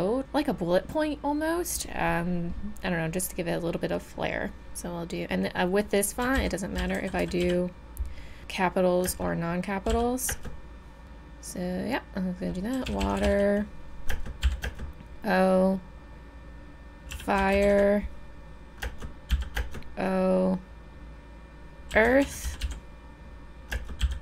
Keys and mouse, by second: 6.2-7.4 typing, 9.0 space, 9.9 o, 10.3 space, 12.7-14.6 typing, 17.1 f, 17.4 i, 17.5 r, 17.6 e, 18.8 space, 19.3 o, 19.6 space, 21.9-22.6 typing, 23.7 space, 24.0 o.